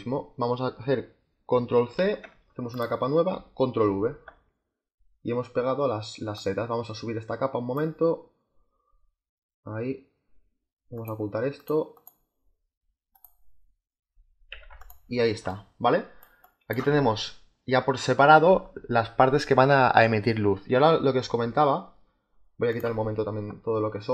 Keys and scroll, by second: 1.8 ctrl+c, 3.7 ctrl+v, 14.4 z, 15.3 space, 24.0 Delete.